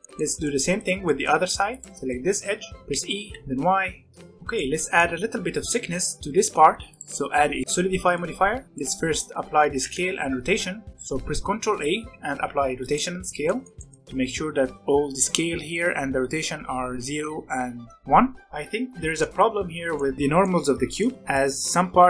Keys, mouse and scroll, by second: 1.6 alt+click, 2.1 middle click, 2.9 e, 4.1 Tab, 4.5-6.1 middle drag, 6.1-6.9 scroll up 1, 6.9 click, 7.6 middle click, 8.4 scroll up 1, 8.6 middle click, 9.6 ctrl+a, 13.5-14.2 shift+middle drag, 14.2 click, 18.4 Tab, 18.8 z, 19.1 middle click, 19.5 a, 19.9-22.0 middle drag.